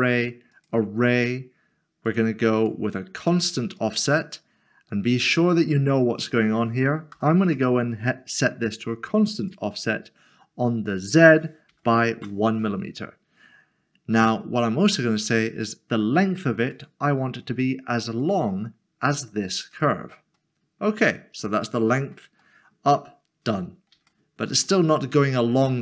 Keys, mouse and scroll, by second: 6.2 click, 7.1 0, 7.5 Return, 9.4 Return, 11.7 1, 12.2 Return, 15.3 click, 20.5 scroll down 1, 21.9-22.6 scroll up 2, 22.6 middle click, 23.7 scroll up 1, 24.1 shift+middle click.